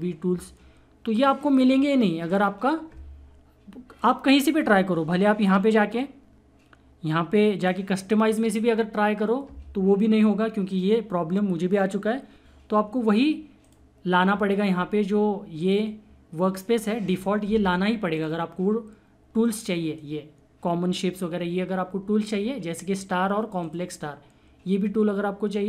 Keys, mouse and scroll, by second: 0.3 typing, 5.1 click, 5.1 typing, 7.6 click, 13.6 click, 18.1-22.4 drag, 23.6 click.